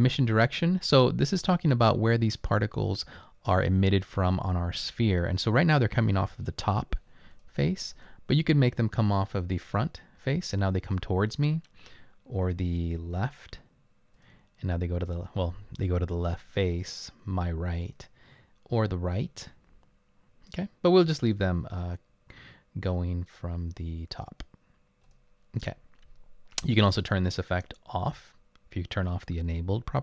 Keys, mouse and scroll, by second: 7.3 click, 7.9 click, 9.7 click, 12.4 click, 14.2 click, 17.8 click, 25.0 click.